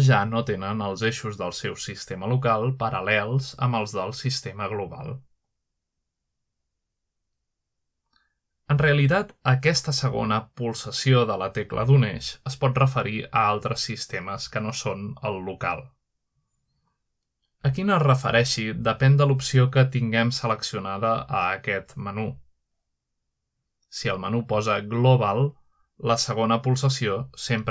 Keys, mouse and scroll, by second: 0.0 z, 0.8 right click, 1.8 click, 3.0 r, 4.1 click, 4.2-5.1 typing, 6.6 typing, 8.5 click, 8.9 middle drag, 9.2 click, 9.7 middle click, 9.8-11.1 typing, 13.0-13.9 shift+drag, 13.5-14.3 shift+middle drag, 14.5-14.9 shift+middle drag, 14.6-15.3 scroll down 2, 15.1 shift+middle click, 16.3 shift+middle click, 16.8-17.5 shift+middle drag, 17.9-18.7 scroll up 1, 18.4-18.9 middle drag, 20.6-21.2 middle drag, 21.0 click, 21.6-22.0 typing, 23.3 typing, 23.9 right click, 25.1 click, 25.1 typing.